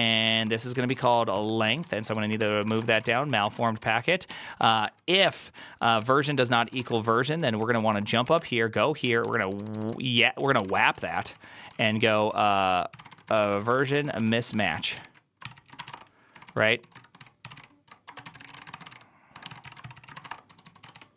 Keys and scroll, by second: 0.0-21.1 typing.